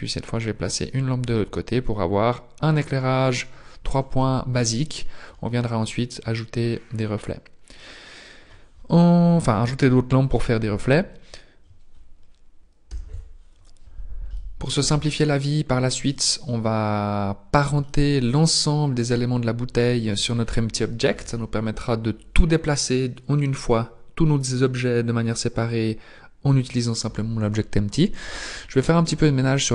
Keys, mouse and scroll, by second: 4.2 middle click, 14.3 middle click, 15.2-15.9 scroll up 2, 16.1 middle click, 17.0-17.5 scroll up 2, 17.8 shift+middle click, 19.0-19.6 scroll down 4.